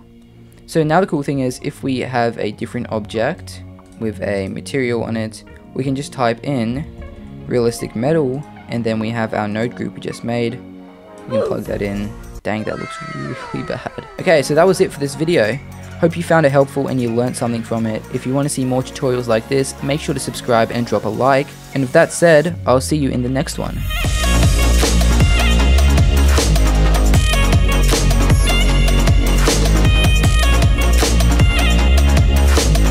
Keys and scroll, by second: 1.3 shift+a, 3.0 g, 5.9 shift+a.